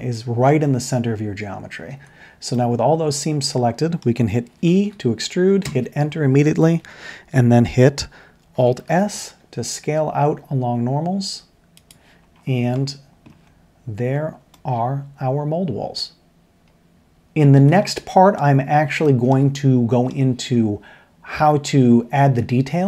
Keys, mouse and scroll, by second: 1.9 Tab, 4.7 e, 8.9 alt+s, 12.9 middle click, 14.5-16.9 middle drag, 16.9 ctrl+z, 17.1 ctrl+z, 17.8-18.5 middle drag, 19.2 shift+middle click, 19.5-19.9 middle drag.